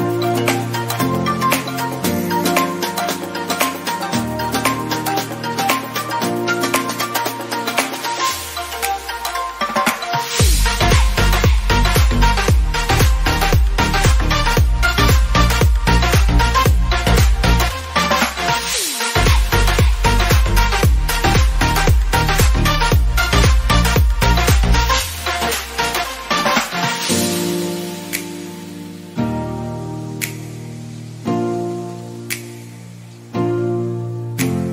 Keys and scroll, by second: 13.4 ctrl+0, 16.8 ctrl++, 18.8 ctrl+0.